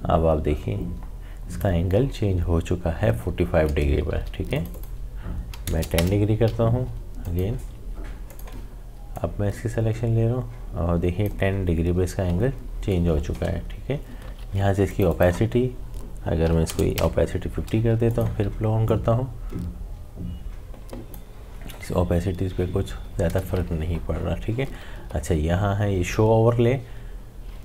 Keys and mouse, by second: 4.1 ctrl+z, 4.5 click, 7.2 alt+click, 8.3-13.5 alt+drag, 14.1 click, 14.2 ctrl+z, 14.9 click, 17.9 click, 18.1-23.6 drag, 24.5 click, 24.6 ctrl+z.